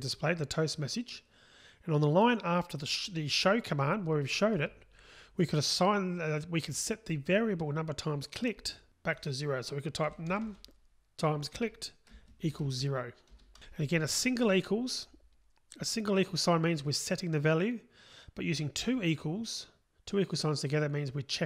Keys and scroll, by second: 11.6 Return.